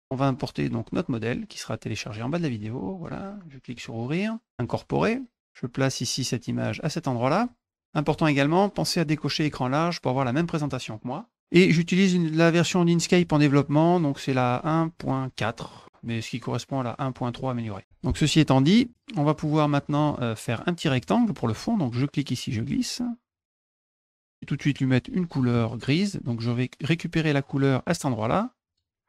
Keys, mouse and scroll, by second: 2.3 click, 3.7 click, 4.6 click, 5.4-7.4 drag, 8.0 click, 10.1 click, 12.0 click, 12.9 click, 18.4 middle click, 18.9 middle click, 20.9 click, 22.0-23.9 drag, 24.3 middle click, 27.4 click, 28.6 click.